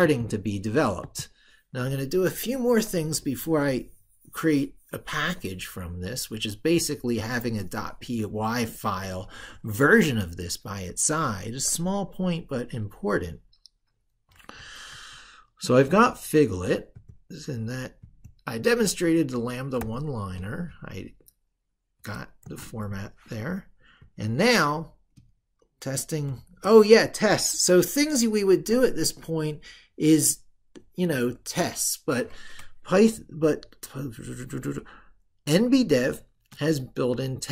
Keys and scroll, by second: 14.7 ctrl+super+Left.